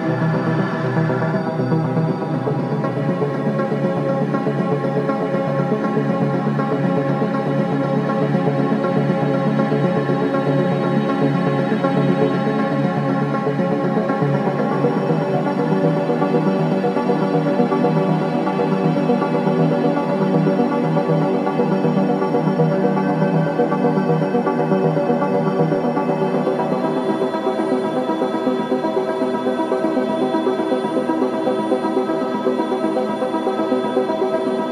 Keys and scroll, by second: 0.1 4, 1.0 shift+i, 3.7 3, 4.6 ], 5.6 3, 7.5 ], 11.0 ], 12.8 ], 14.9 ], 16.5 4, 18.2 2, 18.9 ], 19.4 ctrl+z, 22.0 4, 25.4 F1, 27.9 ctrl+z.